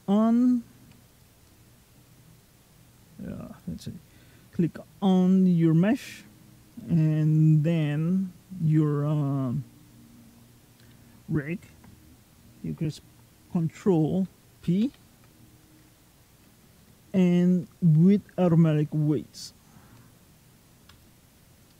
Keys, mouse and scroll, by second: 0.9 click, 3.3 click, 6.5 shift+click, 14.6 ctrl+p.